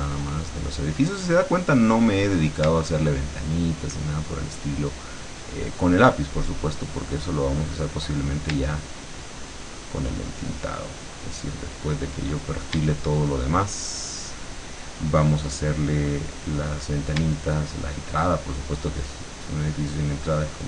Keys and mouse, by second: 4.4-8.1 shift+drag, 9.4-12.3 shift+drag, 13.4-16.5 shift+drag, 18.2-20.6 shift+drag.